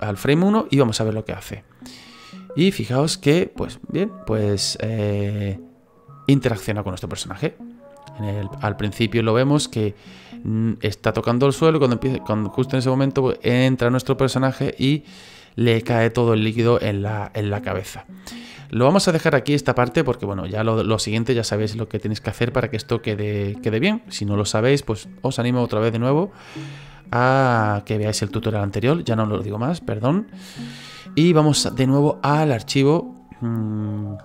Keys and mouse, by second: 1.2 click, 4.3 middle click, 7.1 middle click, 8.8 click, 9.4 click, 16.5 middle click, 19.1 click, 22.2 click, 27.3 click, 32.0 click, 32.9 click.